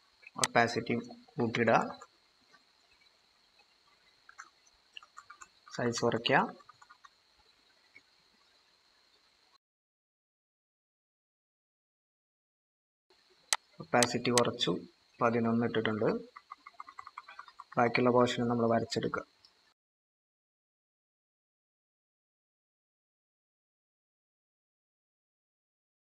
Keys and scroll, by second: 1.4-1.9 typing, 4.0-8.2 typing, 11.8 ctrl+-, 16.0-18.1 typing, 22.1-22.4 typing.